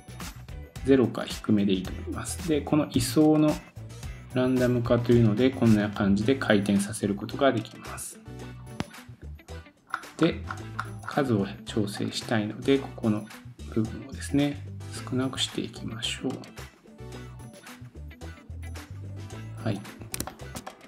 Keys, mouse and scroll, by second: 1.2-3.3 scroll down 1, 8.4-9.4 scroll down 2, 9.4 scroll down 1, 10.5-10.8 scroll up 8, 11.7 scroll up 2, 19.3-20.2 scroll down 4, 20.3 shift+middle click, 20.7 middle click.